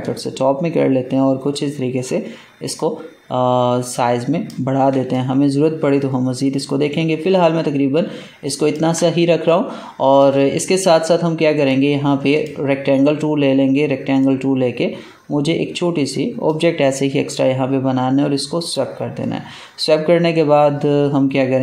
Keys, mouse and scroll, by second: 1.5-4.9 drag, 4.9 ctrl+space, 5.0 ctrl+click, 5.3 ctrl+space, 9.1 space, 9.4 click, 9.5 space, 11.5 right click, 12.3-18.5 drag.